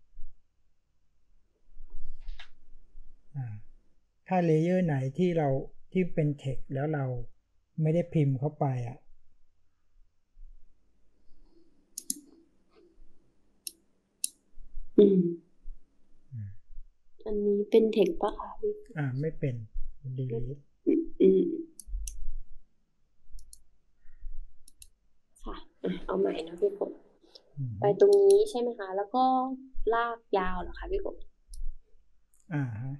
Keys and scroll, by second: 30.5 BackSpace.